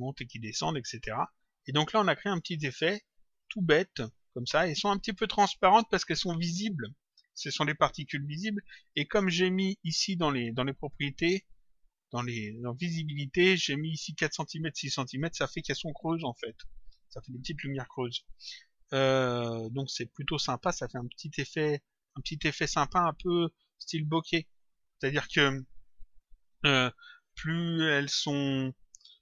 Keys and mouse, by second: 2.1 click, 3.3 click, 10.8 click, 13.0 click, 21.2 click.